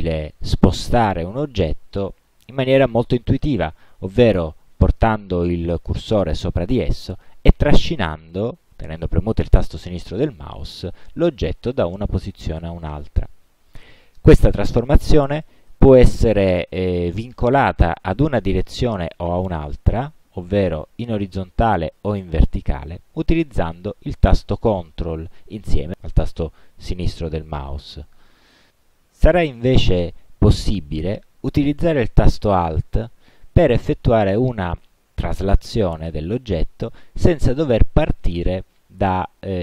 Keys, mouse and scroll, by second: 9.6-13.2 drag, 19.7-21.6 ctrl+drag, 21.9-24.9 ctrl+drag, 38.9-39.6 alt+drag.